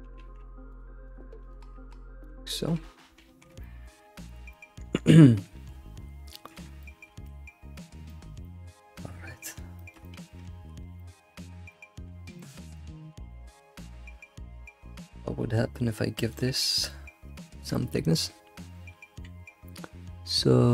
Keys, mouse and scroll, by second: 0.2 g, 1.0 click, 1.5 shift+click, 2.2 scroll down 3, 2.4 middle click, 3.6 middle click, 4.3 click, 4.5-6.5 middle drag, 6.5 click, 6.8-7.1 middle drag, 7.1 alt+shift+z, 7.2 middle click, 7.9 scroll down 2, 8.1-10.4 middle drag, 10.4 ctrl+s, 11.0 middle click, 11.4 scroll up 2, 11.7-13.1 middle drag, 13.1 alt+shift+z, 13.3-14.1 middle drag, 14.1 Tab, 14.4 scroll up 2, 14.7-16.3 middle drag, 16.3-16.6 drag, 16.8 drag, 17.6 q.